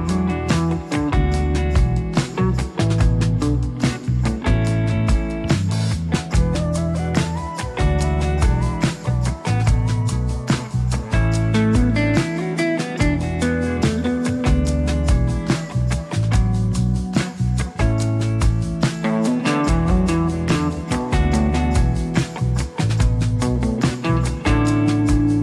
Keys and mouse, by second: 1.3 middle click, 2.1 shift+click, 2.3 shift+click, 3.6 ctrl+click, 4.1 ctrl+click, 5.1 shift+click, 5.3 shift+click, 5.9-10.0 shift+drag, 6.1 f, 10.1-11.2 drag, 11.4 ctrl+z, 11.5 click, 11.8 click, 11.9 click, 13.6 2, 13.9 click, 14.3 middle click, 14.7 ctrl+z, 15.1 right click, 15.6 right click, 16.4 right click, 16.9 shift+right click, 17.4 ctrl+click, 17.8 ctrl+click, 18.1 ctrl+click, 18.5 ctrl+click, 18.9 ctrl+click, 19.3 ctrl+click, 20.2 ctrl+click, 20.8 ctrl+click, 21.3 middle click, 21.9 ctrl+click, 22.2 ctrl+click, 22.4 ctrl+click, 22.5 ctrl+z, 23.7 click, 24.0 click, 24.6 click, 25.0 click.